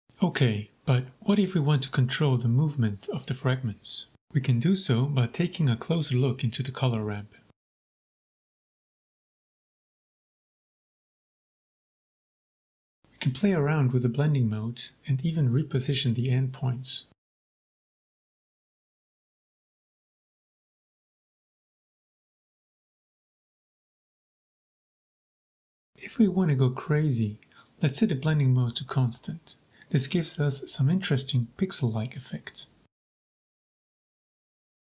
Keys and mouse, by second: 4.6 shift+click, 7.2 click, 7.9 g, 8.0 z, 8.8-9.9 drag, 9.9 g, 10.0 z, 11.2-11.6 drag, 12.0 shift+click, 12.2 shift+click, 13.9-16.1 drag, 17.6-17.9 shift+drag, 18.0-18.4 middle drag, 18.6 shift+click, 20.9-21.6 drag, 21.9-22.7 drag, 23.4 click, 24.6 g, 24.7 z, 26.3 click, 26.8 drag, 27.3 click, 27.7 click, 28.1-29.3 drag, 29.8-30.3 drag, 30.5-31.0 drag, 31.4 g, 31.4 z.